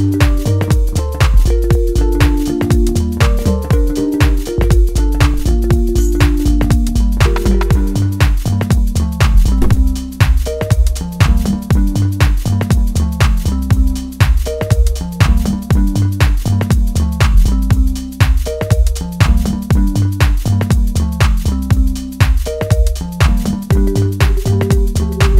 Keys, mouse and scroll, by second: 7.9-11.7 middle drag, 11.9 click, 13.0-15.5 middle drag, 15.5 click, 18.1 right click, 22.9 Return, 23.6 middle click, 24.5 click.